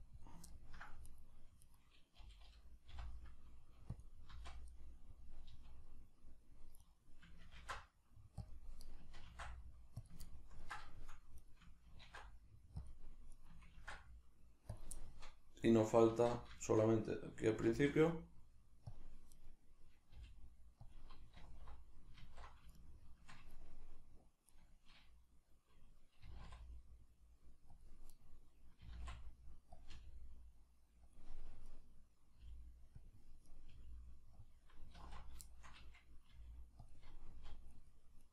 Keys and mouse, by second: 0.1 click, 0.5 ctrl+middle click, 1.1 right click, 1.7 right click, 2.2 g, 4.0 click, 4.3 z, 4.8-6.9 middle drag, 5.5 z, 6.9 right click, 7.6 ctrl+alt+s, 8.5 click, 8.9 right click, 9.3 ctrl+alt+s, 10.1 click, 10.3-11.4 ctrl+middle drag, 11.4 right click, 13.4 right click, 14.8 click, 15.0-19.0 shift+middle drag, 16.1 alt+q, 17.7 shift+d, 19.0 click, 19.4 right click, 20.1 g, 20.9 click, 21.4 alt+q, 22.7-24.5 shift+middle drag, 24.5 right click, 26.2 g, 27.8 click, 28.1 right click, 28.8 g, 29.8 click, 30.0 g, 31.2 click, 31.7 right click, 32.4 g, 33.1 click, 33.5 right click, 33.7 g, 34.5 click, 35.0 alt+q, 35.5-36.9 shift+middle drag, 36.3 g, 36.9 click, 37.3 z, 37.8 right click, 38.2 right click.